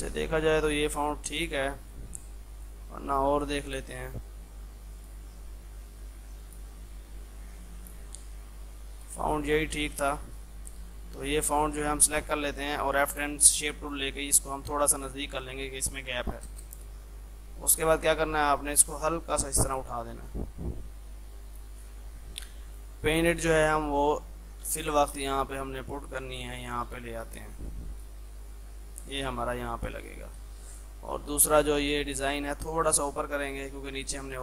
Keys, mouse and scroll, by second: 0.0-2.6 shift+drag, 5.7 scroll down 1, 6.5 click, 10.6 F3, 11.0 F2, 11.0 click, 11.6 F10, 12.1-14.2 drag, 14.2 Left, 16.5 space, 17.7-22.0 drag, 22.0 F3, 22.7-24.7 drag, 24.7 shift+Page_Up, 30.4 F2, 30.5-34.4 drag.